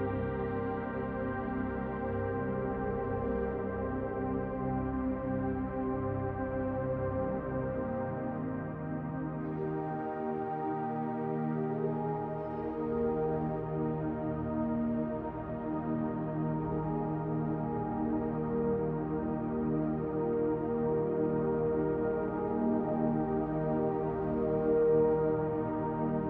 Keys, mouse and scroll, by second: 6.0 click, 9.1 click, 13.9 click, 15.1 shift+click, 20.8 middle click.